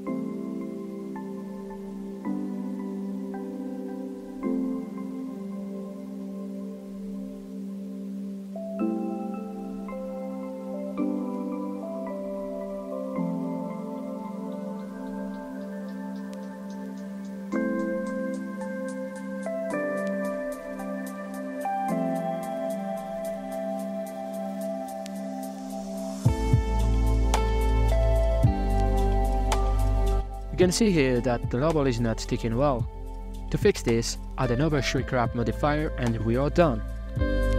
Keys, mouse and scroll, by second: 0.1-1.7 middle drag, 1.7 scroll up 3, 1.8 middle click, 1.9 right click, 3.4 w, 4.9-7.9 drag, 8.2-9.6 drag, 9.6-11.2 middle drag, 11.2 a, 11.3 a, 11.5-12.3 middle drag, 12.3 right click, 13.3-14.9 shift+drag, 14.9 scroll down 2, 15.0-18.0 middle drag, 18.0-19.0 drag, 19.0 middle click, 19.3 scroll up 2, 19.3 g, 23.5 middle click, 24.1 scroll down 2, 24.3 z, 25.8-26.2 middle drag, 26.2 right click, 27.0 h, 27.5-28.3 middle drag, 28.3 scroll up 3, 28.8 shift+b, 29.8 scroll down 3, 29.8-31.8 middle drag, 32.4-33.3 scroll down 4, 32.6-33.0 shift+middle drag, 33.3 middle click, 33.5 scroll up 4, 34.4 click, 36.8-37.5 shift+drag.